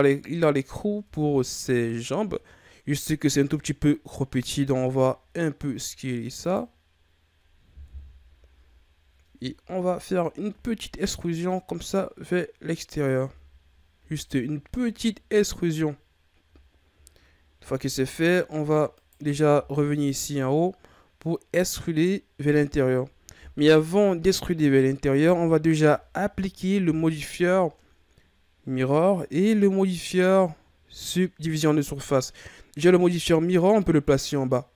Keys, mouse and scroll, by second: 0.7-1.0 scroll up 1, 1.0 Tab, 4.3 s, 7.8 KP_1, 8.8-9.6 ctrl+scroll up 4, 9.7-10.4 shift+scroll down 1, 10.5 e, 13.3 Tab, 13.6 scroll down 4, 14.0 a, 14.6-16.6 scroll up 3, 16.6-17.3 shift+scroll up 4, 17.3-17.7 scroll down 2, 17.7-18.1 shift+scroll up 3, 18.1-19.0 middle drag, 19.0 right click, 19.5 Tab, 23.5 KP_1, 25.2 Tab, 33.8-34.2 drag.